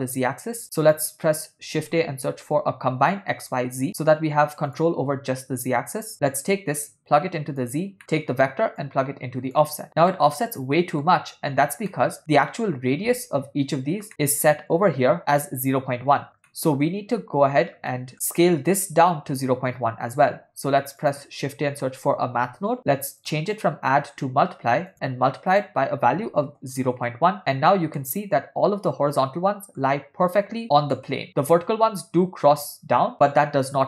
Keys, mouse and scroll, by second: 0.6 shift+a, 6.5-7.8 drag, 8.0 middle click, 8.8 click, 10.2-11.2 middle drag, 11.9 middle click, 14.1 middle click, 16.5 middle click, 17.9 middle click, 20.1 shift+a, 23.6-24.9 drag, 25.6-27.0 drag, 28.1-29.8 middle drag, 31.0 middle click.